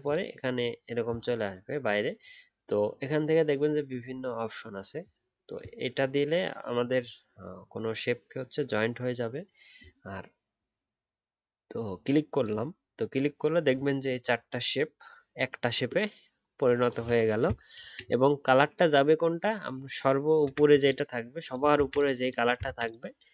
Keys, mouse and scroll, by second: 17.8 ctrl+z, 21.7 ctrl+z, 22.6 ctrl+z.